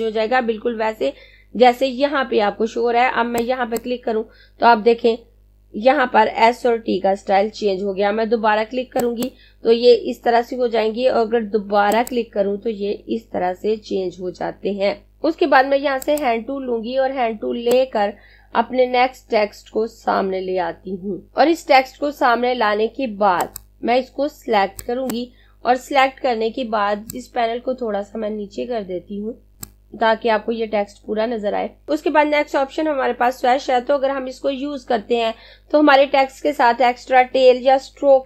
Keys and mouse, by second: 3.3 click, 8.7 click, 11.5 click, 15.1 click, 23.5 click.